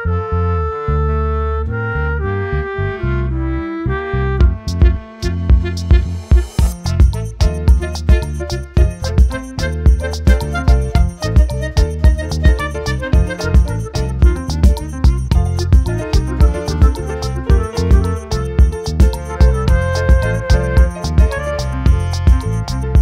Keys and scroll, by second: 10.8 ctrl+t, 16.8 ctrl+j, 21.7 ctrl+j.